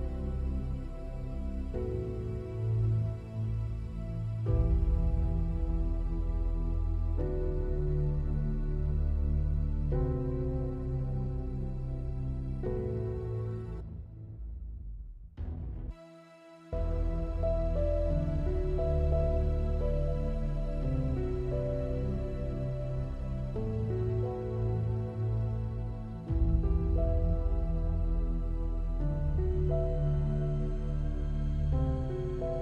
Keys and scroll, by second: 14.1 s, 16.1 s, 16.9 s, 20.8 F8, 31.3 F7.